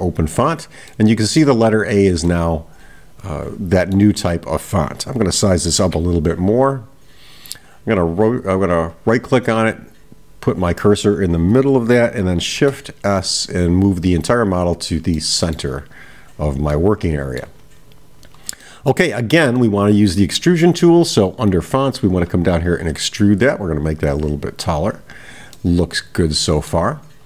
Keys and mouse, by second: 0.9-1.5 middle drag, 2.3-4.3 middle drag, 7.8-10.0 right drag, 15.3-15.7 middle drag, 16.7-17.4 middle drag, 18.6-19.0 middle drag, 19.6-20.3 middle drag, 24.0-25.2 drag, 25.6-26.8 middle drag.